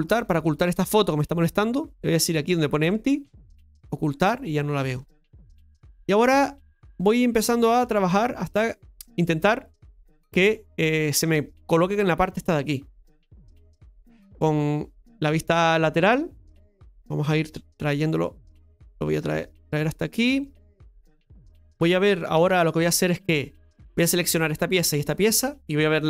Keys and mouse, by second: 3.6 click, 5.0 shift+middle click, 5.5 middle click, 7.1-8.1 drag, 9.8 middle click, 16.7-18.6 drag, 16.7 KP_3, 18.6-21.7 middle drag, 21.7 KP_Divide, 24.2 Tab, 24.5 right click, 25.1 shift+right click.